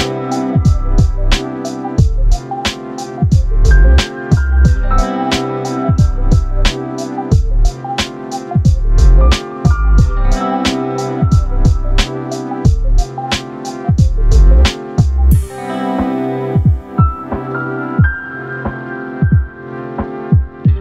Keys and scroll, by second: 5.1 ctrl+t.